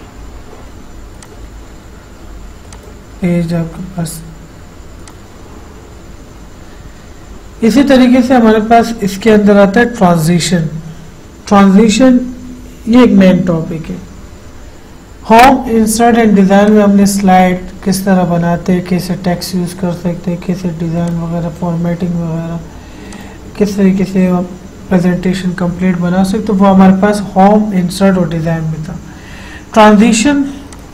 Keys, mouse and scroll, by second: 1.4 click, 9.5 click, 16.9 click, 21.3 click, 23.4 click.